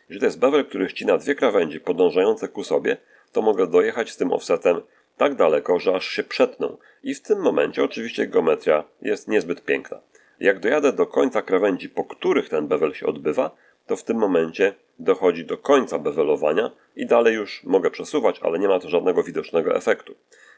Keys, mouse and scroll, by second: 0.1 ctrl+click, 0.8-2.0 ctrl+middle drag, 3.4-10.6 drag, 15.4-17.8 drag, 20.2-20.5 drag.